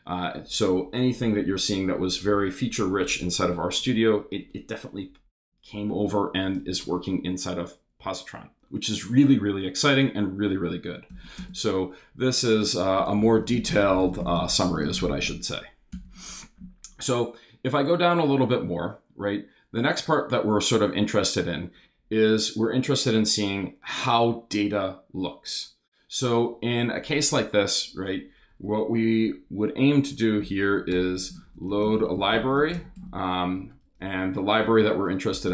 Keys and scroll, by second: 11.1 shift+3, 11.4 shift+space, 12.6-15.5 typing, 15.9 Return, 30.9-35.5 typing.